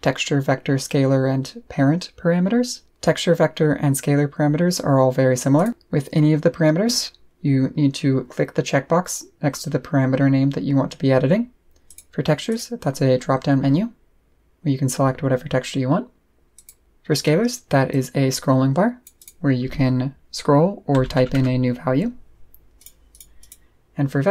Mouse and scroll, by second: 5.5 click, 9.7 middle click, 10.4-11.0 scroll down 2, 11.1 scroll down 2, 11.4 scroll up 2, 11.9 click, 12.5 click, 13.1-14.5 middle drag, 16.5 click, 17.9-19.0 drag, 19.2 click, 22.8 click, 23.1 click, 23.4 click.